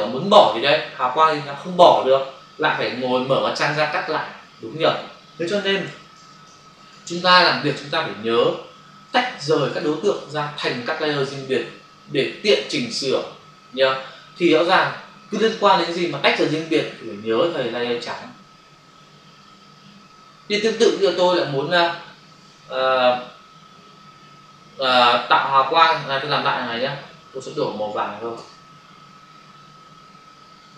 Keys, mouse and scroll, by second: 9.1 ctrl+d, 9.7 click, 26.5 ctrl+click.